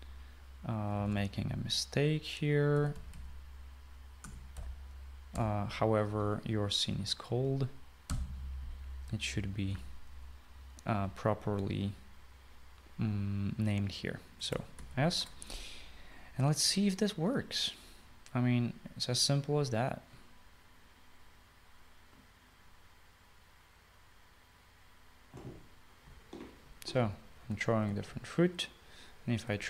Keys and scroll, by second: 0.0-0.8 typing, 2.0 typing, 3.6-5.3 typing, 6.4 typing, 8.9-9.6 typing, 15.8 ctrl+s, 27.1-29.4 typing.